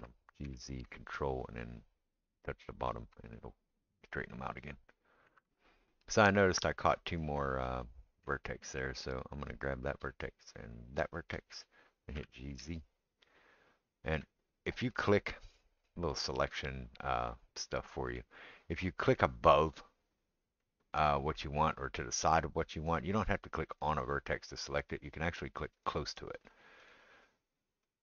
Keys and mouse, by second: 3.0-14.9 ctrl+middle drag, 5.4 Tab, 9.5 click, 12.2 g, 14.9 click, 15.0-23.7 middle drag, 23.7 click, 24.7-25.8 middle drag, 25.8 click, 25.9 middle click, 26.8 click, 26.9-27.9 middle drag, 27.9-28.0 drag.